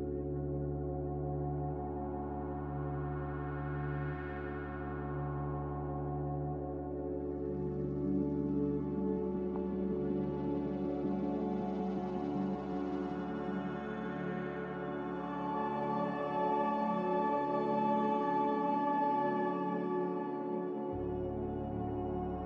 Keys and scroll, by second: 1.5 ctrl+z, 2.0 ctrl+z, 4.9 Escape, 8.9 2, 9.0 5, 9.2 Return, 12.2 typing, 12.4 Return, 16.0 ctrl+z, 16.2 ctrl+z, 20.0 typing, 20.3 Return, 22.1-22.4 typing.